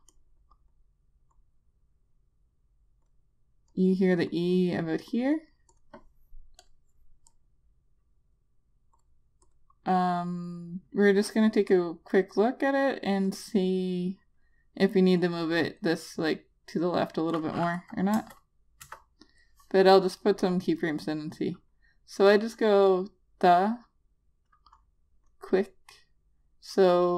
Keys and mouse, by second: 0.5 click, 18.6 Return, 19.3 Return, 19.9 click.